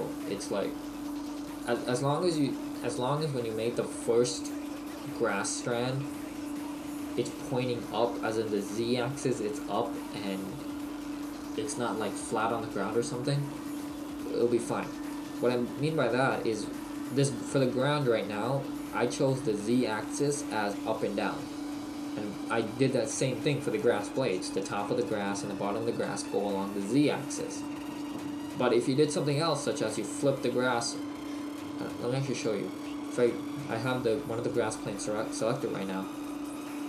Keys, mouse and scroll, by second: 15.2 middle click, 16.9 right click, 32.4 click.